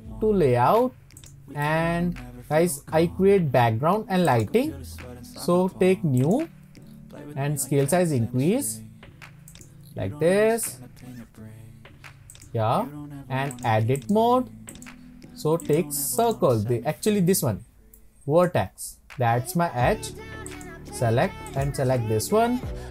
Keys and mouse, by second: 1.2 click, 1.6-2.8 middle drag, 4.3-6.4 drag, 8.4 s, 9.5 click, 10.5 s, 12.3 click, 14.0-15.7 drag, 16.2 click, 18.0 shift+middle click, 18.2 shift+click, 20.5 drag, 21.5 click.